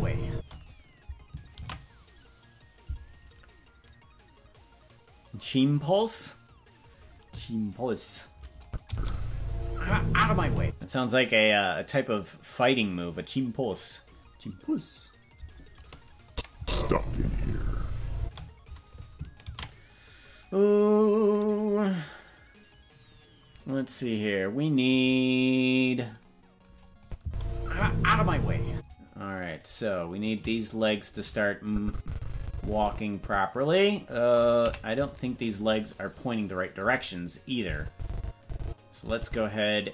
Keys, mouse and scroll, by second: 0.3 space, 3.9 ctrl+s, 8.6 click, 8.8 space, 10.6 space, 16.3 click, 16.5 space, 18.2 space, 21.8 ctrl+s, 25.0-26.2 right drag, 27.0 click, 27.2 space, 28.7 space, 30.3 right click, 30.9 shift+right click, 31.6-33.5 drag, 34.6 KP_Decimal, 35.3-36.9 scroll down 10, 37.6-39.2 drag.